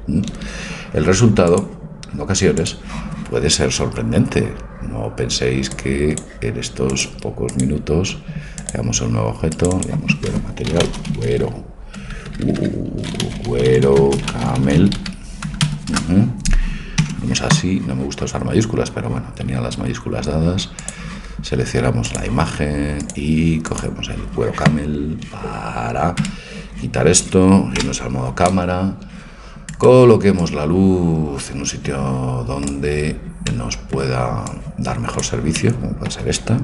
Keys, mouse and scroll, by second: 2.8 click, 5.7-11.7 drag, 12.1 BackSpace, 12.2 BackSpace, 12.6 BackSpace, 20.8-22.8 drag, 23.1-24.9 drag, 26.2 Tab, 27.8 KP_0, 29.8-31.5 right drag, 30.4-32.4 drag, 33.5 middle click, 34.5 click, 35.2-36.3 right drag.